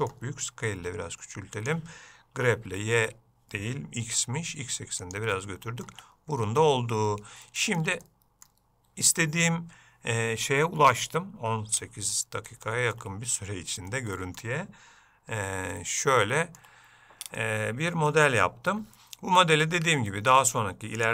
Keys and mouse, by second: 5.5 middle click, 6.1 Tab, 6.6 Tab, 7.6 shift+middle click, 8.2 middle click, 12.8 shift+middle click, 14.0 ctrl+middle click, 15.9 shift+middle click, 17.5 middle click.